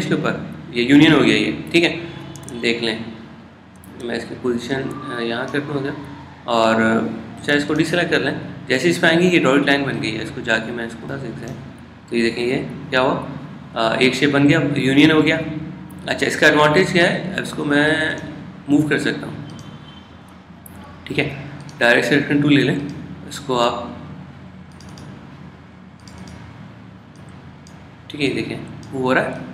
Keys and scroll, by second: 3.5 super+z, 3.8 super+z, 11.1 super+z.